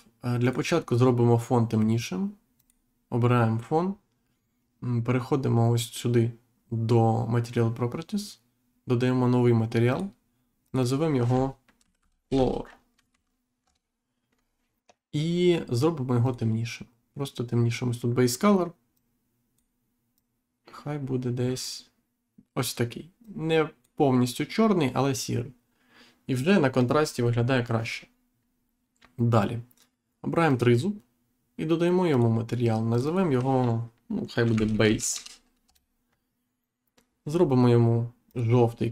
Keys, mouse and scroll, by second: 0.4 click, 2.5 click, 9.8 click, 10.6 click, 12.2 o, 13.0 r, 16.2 click, 18.9 click, 20.1 click, 23.2 click, 30.4 click, 32.0 click, 32.8 click, 34.3 b, 34.5 a, 34.8 s, 35.6 Return, 38.2 click.